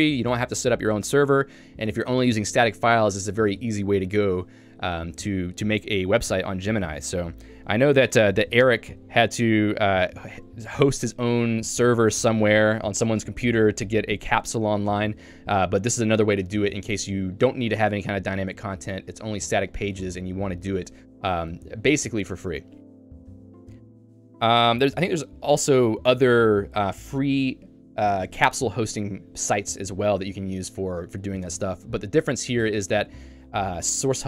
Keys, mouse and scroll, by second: 6.7 Escape, 25.8 Escape.